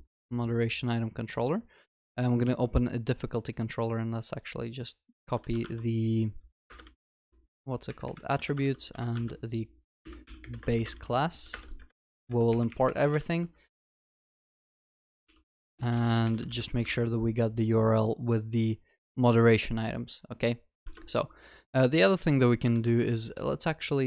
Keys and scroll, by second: 5.4 ctrl+c, 5.7 ctrl+Tab, 7.1 ctrl+v, 7.3 ctrl+Tab, 8.6 ctrl+w, 9.1 ctrl+c, 9.3 ctrl+Tab, 11.5 alt+Return, 13.2 ctrl+w, 16.6 ctrl+s, 20.9 ctrl+Tab, 23.3 ctrl+c.